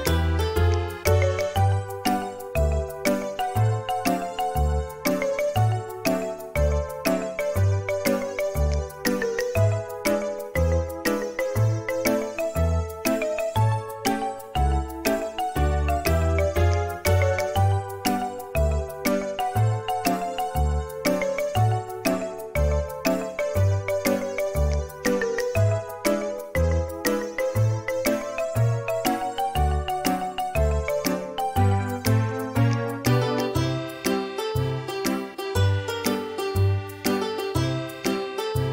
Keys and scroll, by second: 1.4-2.1 typing, 11.6 space, 13.2 Delete, 13.8 space, 17.7 Delete, 19.8 b, 21.9 space, 27.9 Escape, 27.9 k, 29.9 m, 30.8 space, 31.2 Escape, 34.3 Escape, 37.5 Delete, 37.5 Escape.